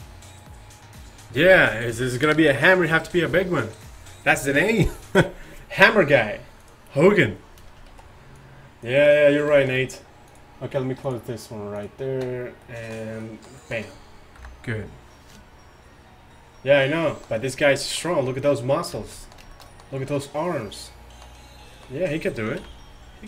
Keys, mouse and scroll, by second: 8.0 shift+s, 12.7-13.6 middle drag, 14.4 KP_5, 22.7 KP_1.